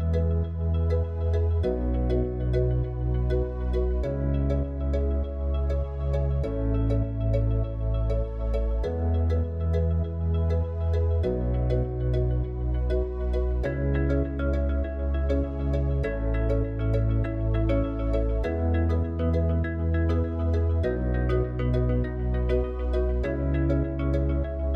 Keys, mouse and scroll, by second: 4.0 click, 5.8-6.5 drag, 9.6 click, 11.1 click, 12.5 click, 14.7 s, 22.5 click.